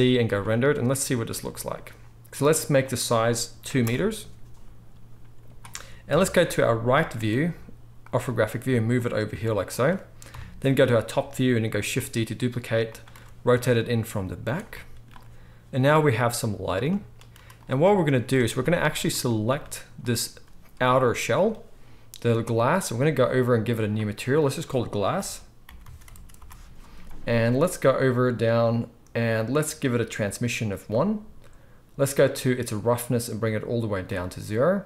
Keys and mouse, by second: 6.1 KP_3, 7.1 r, 8.1-20.0 middle drag, 8.9 g, 9.3 r, 10.3 KP_7, 11.8 shift+d, 13.1 r, 17.3 z, 18.4 ctrl+s, 18.5 ctrl+s, 20.0 click, 20.4-23.8 middle drag, 20.8 g, 23.8-34.8 drag, 26.1 s.